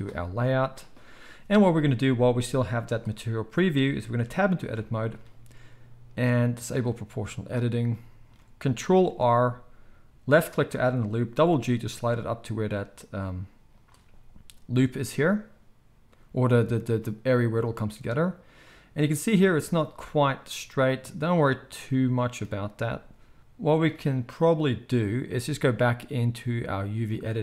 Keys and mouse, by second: 0.7-6.5 middle drag, 2.0 z, 4.6 Tab, 6.5 click, 6.6-9.0 middle drag, 9.0 ctrl+r, 9.0 ctrl+click, 9.3-27.4 middle drag.